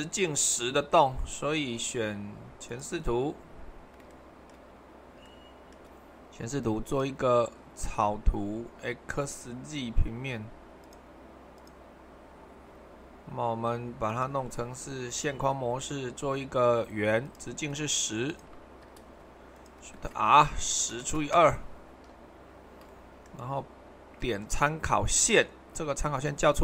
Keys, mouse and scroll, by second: 1.5-2.5 middle drag, 4.1-6.8 shift+middle drag, 14.1-16.1 drag, 20.0-21.1 typing, 21.3 Return.